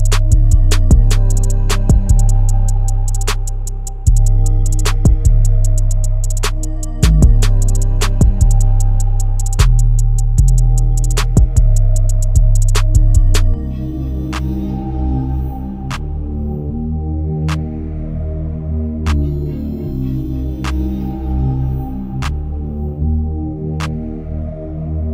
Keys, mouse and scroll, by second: 0.4 scroll up 1, 0.4 Escape, 0.8 click, 4.0-12.2 drag, 12.2-12.6 scroll up 1, 12.6 click, 12.6 click, 13.7 scroll down 1, 13.9-14.4 scroll up 1, 14.4 scroll down 1, 14.6-14.9 scroll up 1, 15.2-16.9 drag, 16.9-17.6 scroll down 1, 17.6-18.0 scroll up 1, 18.5 click, 19.2 scroll down 1, 19.4-19.9 scroll up 1, 19.9-21.4 drag, 21.4 scroll down 1, 21.6-22.2 scroll up 1, 22.2 click, 22.6 scroll down 1, 22.8 scroll up 1, 23.7-25.1 drag.